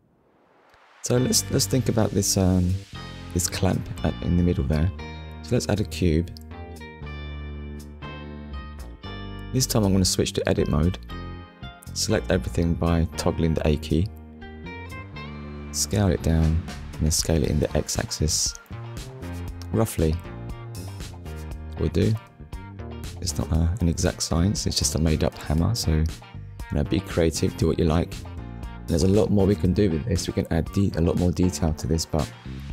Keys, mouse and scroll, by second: 0.0 shift+middle click, 4.6 shift+a, 6.1 click, 9.5 Tab, 18.2 click, 25.6 click, 26.3 middle click, 28.5 click, 29.0 middle click.